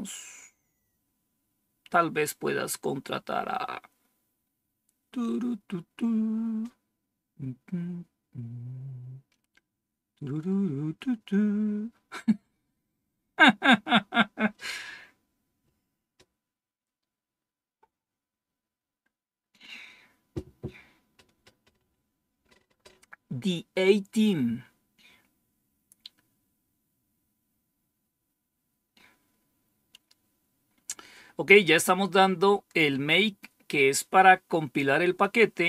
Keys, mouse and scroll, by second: 35.1-35.6 drag.